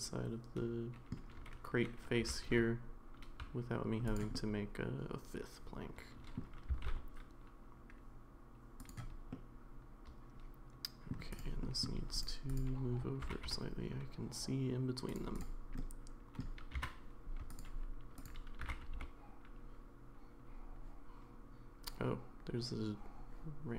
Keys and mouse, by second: 2.2 g, 4.4-6.4 middle drag, 6.7 s, 9.3-11.1 middle drag, 11.7 middle click, 12.2-13.2 drag, 13.2 g, 15.8 middle click, 16.7 g, 18.6 g.